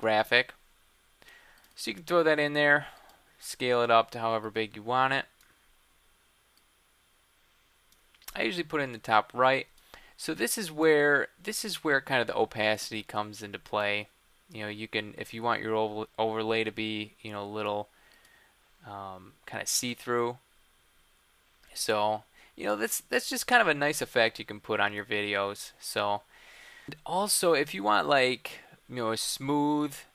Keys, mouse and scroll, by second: 24.8-28.0 drag.